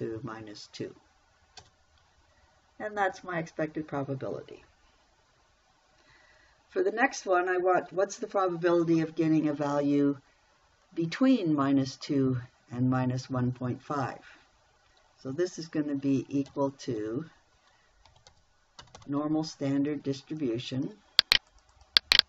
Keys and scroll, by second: 2.0 Return, 16.9 =, 18.5 n, 18.7 o, 19.2 r, 19.4 m.